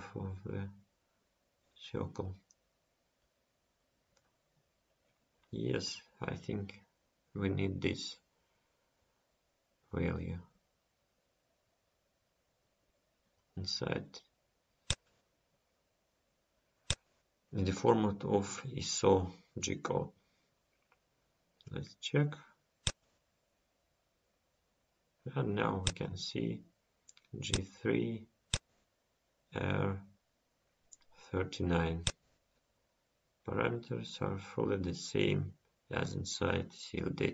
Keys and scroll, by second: 8.6 ctrl+s.